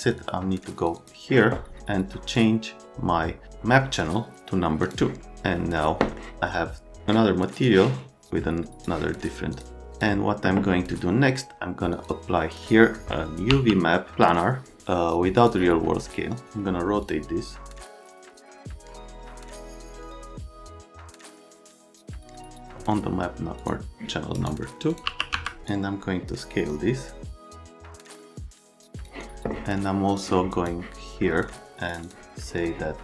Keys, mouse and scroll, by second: 0.0 click, 0.1 click, 0.7 click, 0.9 click, 2.3-3.4 drag, 4.8 click, 6.2 middle click, 7.6 click, 9.5 click, 9.9 click, 11.9 click, 13.5 y, 15.3 click, 17.0 click, 17.8 middle click, 17.9 scroll, 18.3 middle click, 18.6 middle click, 18.9 F3, 19.4 scroll, 19.6 middle click, 19.8 middle click, 20.8 middle click, 21.2 F3, 21.8 right click, 22.0 click, 22.5 click, 23.6 click, 24.3 right click, 24.9 click, 25.0 r, 25.3 z, 25.6 middle click, 26.7 middle click, 27.8 click, 28.8 click, 30.2 click, 31.2 right click, 31.9 click, 32.0 click, 32.4 right click.